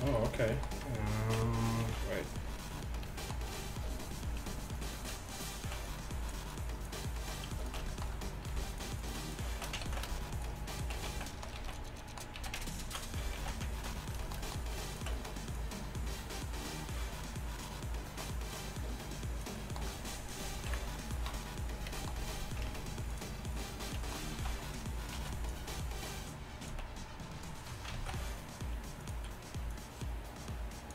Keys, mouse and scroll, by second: 1.9 KP_1, 9.9 ctrl+z, 11.1 z, 11.6 z, 12.4 z, 14.0 ctrl+x, 20.8 KP_1, 22.8 ctrl+Tab, 23.2 KP_1, 24.4 ctrl+Tab, 25.2 z, 28.0 b, 28.0 z, 29.8-30.9 drag, 29.8-30.9 middle drag, 29.8-30.9 right drag.